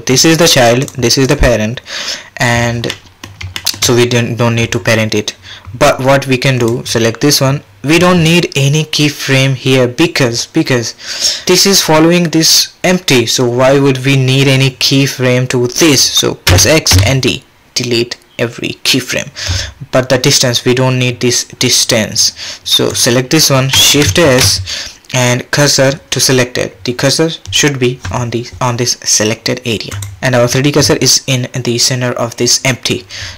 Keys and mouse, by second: 0.2 click, 0.8 click, 1.2 click, 2.9-3.2 drag, 3.6 shift+middle click, 6.6 click, 16.5 x, 23.0 click, 24.2 shift+s.